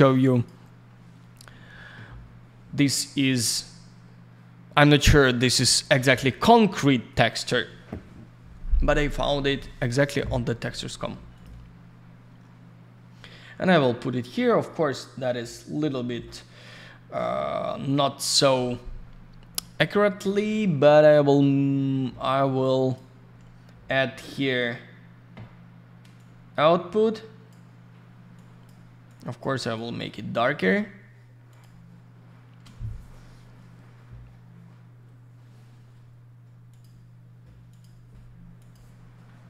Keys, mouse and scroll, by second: 0.3 click, 0.4 click, 7.1 click, 7.3 click, 11.3 click, 11.4 click, 14.3 scroll up 1, 15.4 scroll down 1, 16.3-16.6 scroll down 1, 17.0-17.5 scroll up 1, 17.5 scroll down 1, 19.8 click, 22.1 middle click, 22.6 click, 26.1 click, 28.3 click, 29.0 click, 29.7 click, 30.5 click, 30.6 click, 31.5 click, 31.6 click, 36.7 click, 36.8 click, 37.7 click, 37.8 click.